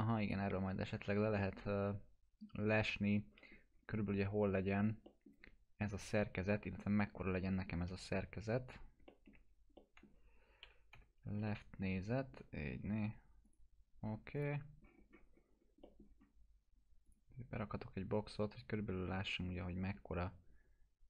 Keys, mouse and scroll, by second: 0.2 click, 1.4-3.6 alt+middle drag, 4.1 scroll up 1, 5.1 middle click, 6.5-7.4 alt+middle drag, 7.9 f, 9.1 alt+middle click, 9.3 alt+q, 9.7 alt+middle click, 10.6 l, 11.4-12.4 alt+middle drag, 13.4 click, 14.8 scroll up 1, 15.8 middle click, 16.0 scroll down 1, 17.0 click, 17.5 scroll up 1.